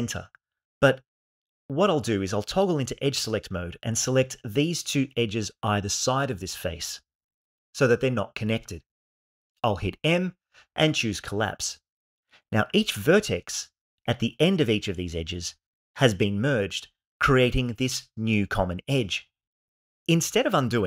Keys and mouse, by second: 2.4 2, 4.9 shift+click, 9.9 m.